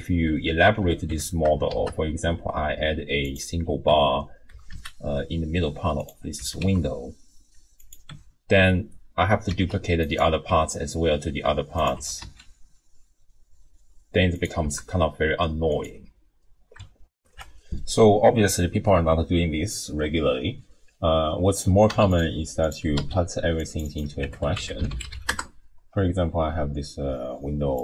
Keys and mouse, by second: 0.3 ctrl+z, 1.1 Tab, 1.7 shift+a, 3.9 Tab, 4.5 s, 6.4 s, 8.1 Tab, 9.7 shift+d, 10.4 g, 11.9 r, 14.7 g, 17.2 ctrl+alt+shift+w, 17.3 ctrl+alt+shift+q, 21.9 x, 22.6 click, 23.0 c, 23.6 click, 24.9 click.